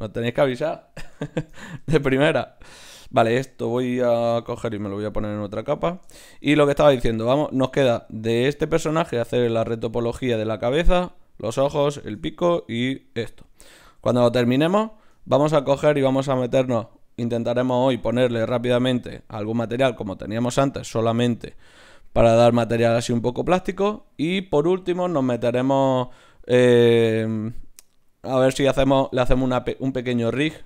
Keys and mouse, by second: 1.3 shift+c, 3.0 right click, 4.3 right click, 4.3 m, 5.7-7.4 right drag, 7.4-12.6 middle drag, 12.6 right click.